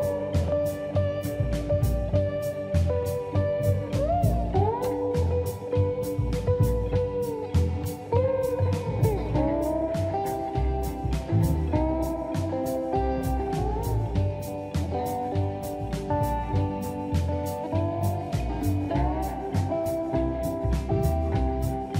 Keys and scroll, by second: 0.1 Escape, 4.1 m, 11.6 space, 11.7 Escape.